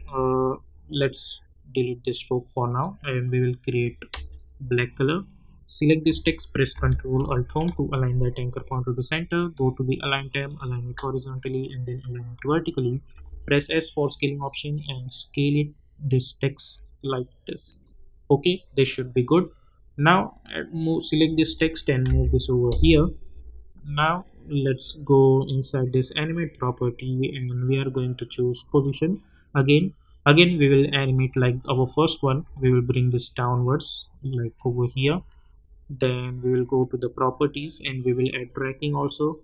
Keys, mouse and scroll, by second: 2.0 click, 7.4 ctrl+alt+Home, 9.5 click, 13.1 s, 13.6-21.5 drag, 22.0 [, 24.1 click, 28.5 click, 32.5-39.4 drag.